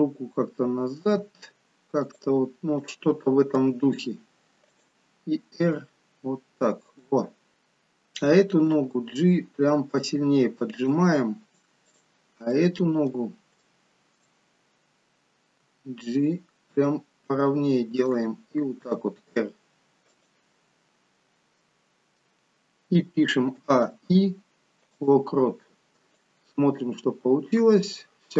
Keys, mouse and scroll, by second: 2.9 click, 3.7 g, 5.7 r, 7.5 click, 8.7 g, 12.0 click, 12.6 middle click, 13.6 shift+middle click, 15.7 g, 18.8 r, 21.0-21.7 scroll down 4, 21.7 middle click, 23.7 a, 23.9 i, 26.3 click.